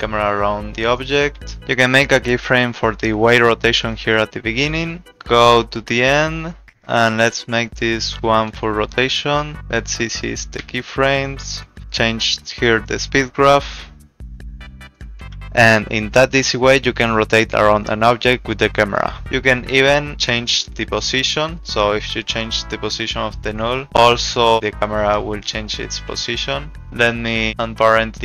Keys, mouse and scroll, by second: 1.4 ctrl+z, 19.2 p, 22.9 click, 26.3 ctrl+z, 26.8 ctrl+z.